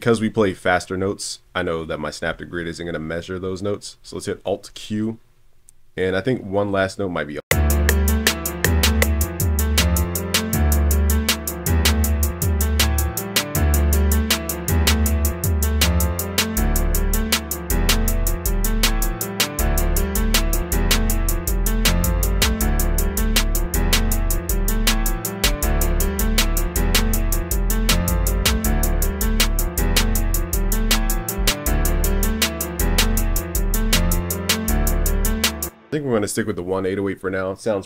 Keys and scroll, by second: 13.3 super+Down, 14.5 super+Up, 16.2 super+Down, 26.8 super+s.